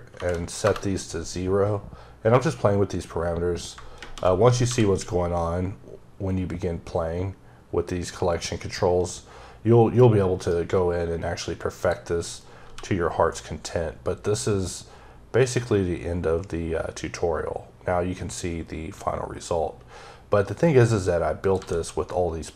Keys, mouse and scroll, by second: 0.0 KP_Decimal, 0.5 KP_Enter, 3.6 shift+KP_Enter, 10.2 right click, 11.6 click, 12.5 g, 21.3 click, 21.4 s.